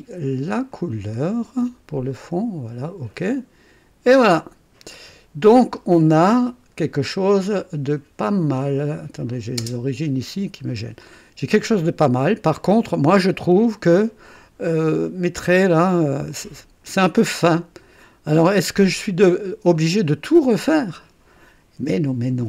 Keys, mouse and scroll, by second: 0.7 click, 2.1 click, 3.2 click, 4.0 click, 5.1-5.9 drag, 7.4-8.0 scroll up 1, 8.5 scroll down 1, 9.2 click, 9.6 space, 10.3 scroll down 1, 11.0-12.4 drag, 12.6 scroll up 1, 13.4-14.1 scroll down 1, 14.3-15.6 drag, 16.3-17.5 drag, 18.0 click, 18.6 right click, 19.5 scroll down 1.